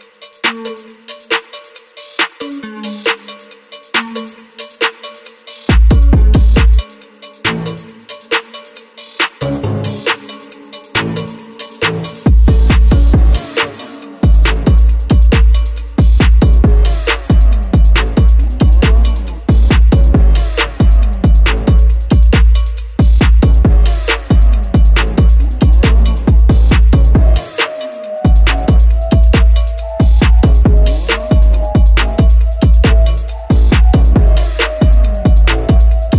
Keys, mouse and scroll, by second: 13.4 click, 15.3-15.8 scroll down 11, 15.8 click, 16.3-17.1 scroll up 8, 17.0 click, 17.2-18.5 scroll down 13, 18.9-19.4 scroll down 4, 19.0 click, 19.4 n, 20.0 click, 20.4 g, 21.6 g, 22.2 r, 22.9 g, 24.4 click, 24.8-25.4 scroll down 8, 25.0 click, 25.4 click, 25.5-25.8 scroll up 8, 26.6 middle click, 26.7-27.0 scroll down 5, 27.3-31.2 typing, 28.6 middle click, 28.8 middle click, 30.2 middle click, 31.8 click, 32.2 click, 32.4 click, 32.7 0, 33.1 click, 33.4 click, 33.7 0, 35.1 click.